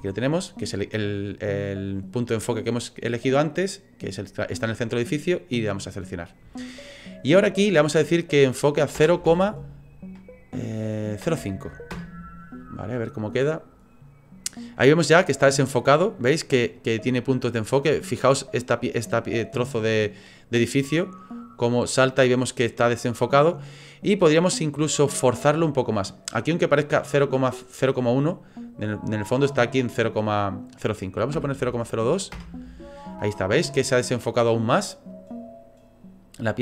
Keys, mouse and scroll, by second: 7.4 click, 16.7 click, 19.8 click, 28.1 click, 35.1 click.